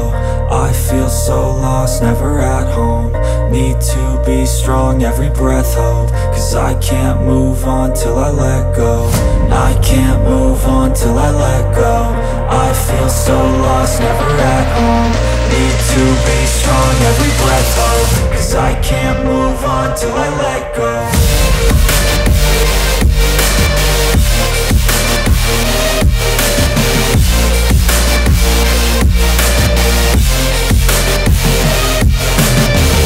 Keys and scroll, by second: 6.9 F3, 15.7 shift+Page_Up, 20.1 Escape.